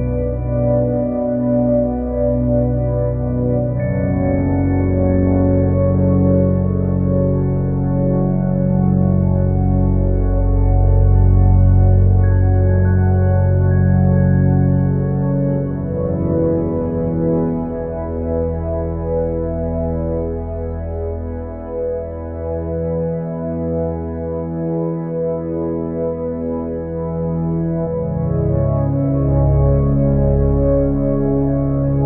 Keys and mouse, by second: 24.2 click.